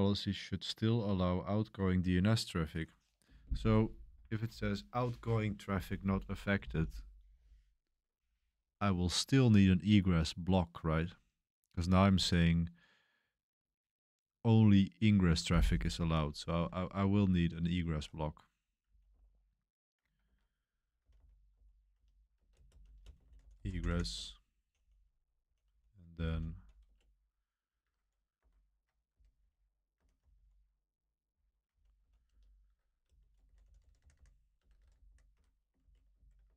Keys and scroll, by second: 16.7-25.4 typing, 26.7 typing, 26.8 Return, 27.9-36.3 typing.